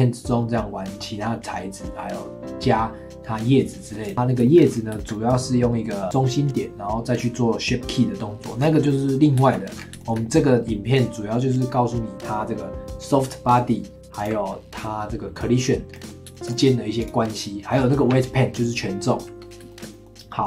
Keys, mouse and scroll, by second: 4.0 click, 4.1-4.7 middle drag, 4.7 scroll up 3, 4.9-6.8 shift+middle drag, 8.6 scroll down 3, 8.9-9.8 middle drag, 9.8 scroll up 2, 10.0-13.0 shift+middle drag, 14.2 click, 15.9-17.0 middle drag, 17.0 click, 19.7-20.4 shift+middle drag.